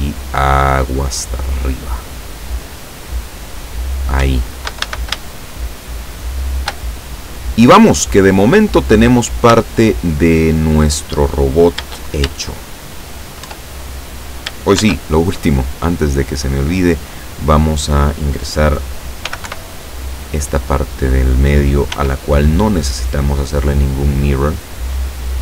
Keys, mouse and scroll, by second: 3.9-4.3 scroll down 1, 4.3 Caps_Lock, 5.3-6.9 shift+middle drag, 7.7 scroll down 2, 8.2-8.6 scroll up 2, 9.7-10.9 shift+middle drag, 12.9-13.3 shift+scroll down 3, 13.5 Tab, 13.8-14.3 scroll up 1, 14.8 shift+a, 16.7 click, 19.3 g, 19.5 y, 21.2 click, 22.0 s, 23.6 click, 24.5-25.4 drag.